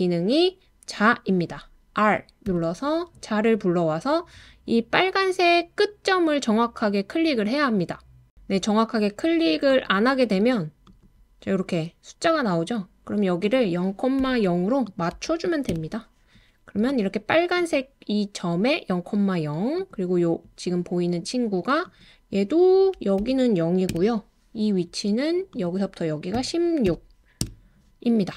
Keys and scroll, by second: 2.4 r, 14.0-15.7 typing, 23.2-23.9 typing, 26.3-27.4 typing.